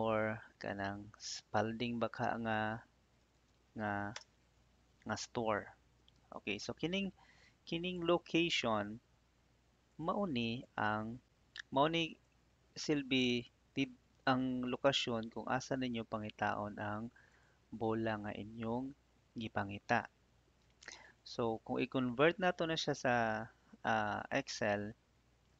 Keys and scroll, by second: 0.8 shift+s, 1.1 p, 4.1 Return.